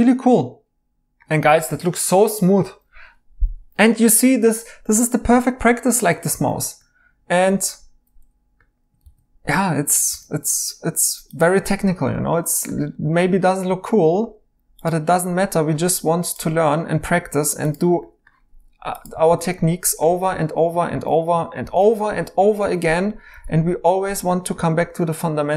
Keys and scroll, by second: 9.0 e, 10.1 e, 19.2-23.3 typing.